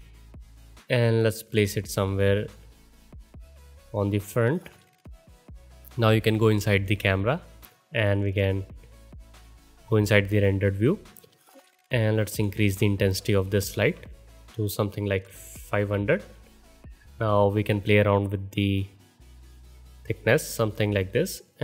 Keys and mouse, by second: 1.5-6.5 alt+drag, 6.5 KP_0, 7.4 click, 8.4 middle click, 10.3-12.3 drag, 13.7 KP_0.